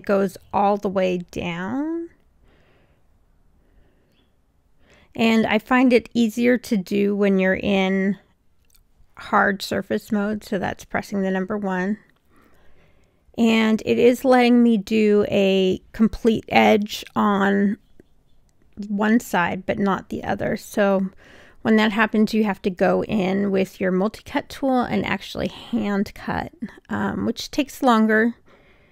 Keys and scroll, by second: 3.6 1, 26.5 Return.